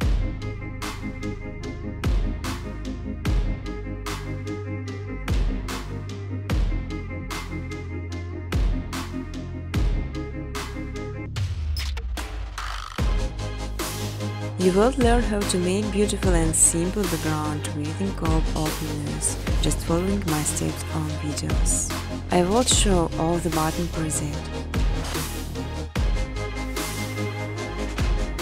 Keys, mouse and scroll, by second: 0.5 click, 1.3 click, 4.8 right click, 7.2 click, 8.8 click, 9.5 click, 10.4 right click, 11.9 click, 13.1 right click, 15.6 right click, 16.9 click, 18.1 click, 20.7 click, 23.6 click, 24.3 click, 25.1 click, 25.9 click, 27.6 t.